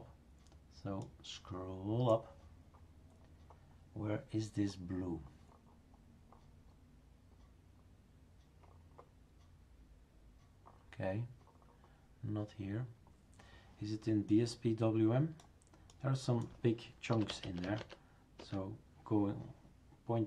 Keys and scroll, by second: 16.9-18.3 typing, 18.4 Return.